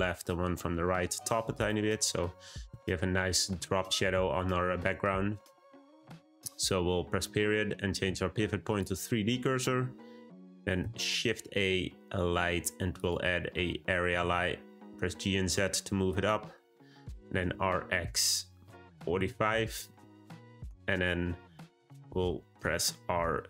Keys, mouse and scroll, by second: 1.5 click, 7.2 ., 10.8 shift+a, 14.0 g, 17.2 r, 23.0 r.